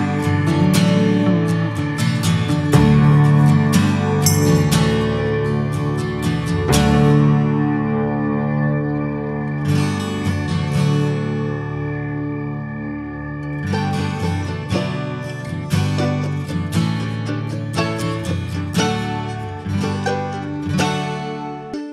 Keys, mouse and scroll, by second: 0.7 click, 1.7 scroll down 2, 1.8-2.5 middle drag, 2.5 click, 2.8 middle click, 3.0 click, 3.3 ctrl+a, 3.8 middle click, 4.0 Tab, 4.4 shift+middle click, 5.3 click, 5.6 scroll down 2, 5.8 middle click, 6.2 Tab, 6.4 click, 6.8 alt+middle click, 7.0 alt+middle click, 7.2 scroll up 1, 7.4 ctrl+a, 7.9-8.2 scroll up 1, 8.2 Tab, 8.7 Tab, 9.1 drag, 9.4 alt+z, 9.8-11.4 right drag, 11.4 shift+middle click, 11.7 s, 13.4-14.8 drag, 14.8-15.8 scroll down 2, 15.8 drag, 16.9 s.